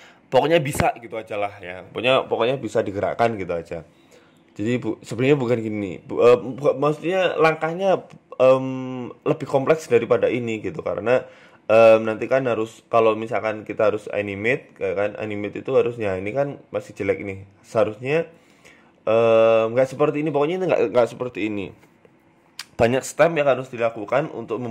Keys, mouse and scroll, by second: 0.4 a, 1.0 shift+right click, 2.5 click, 4.5 right click, 4.9 right click, 5.8 click, 6.6 right click, 7.2 shift+right click, 8.0 ctrl+p, 10.4 right click, 10.8 right click, 11.3 middle click, 12.0 Tab, 12.3 click, 13.4 right click, 14.0 r, 14.8 KP_3, 15.4 right click, 15.4 r, 16.5 right click, 16.5 r, 18.0 shift+right click, 18.8 right click, 19.1 shift+right click, 19.6 r, 21.3 right click, 21.8 shift+right click, 22.2 r, 23.6 right click, 23.8 r.